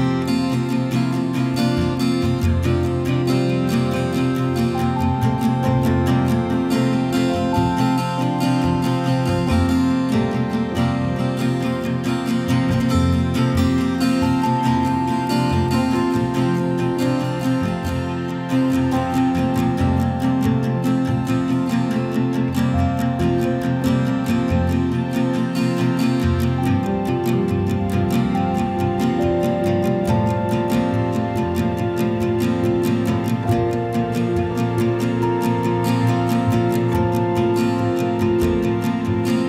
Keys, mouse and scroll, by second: 1.2 click, 4.9 click, 10.3 click, 11.7 click, 12.3 ctrl+click, 12.8 ctrl+click, 15.7 click, 19.6 click, 24.1 click, 33.9 click, 34.8 click, 35.6 ctrl+click, 36.2 ctrl+click, 37.4 click.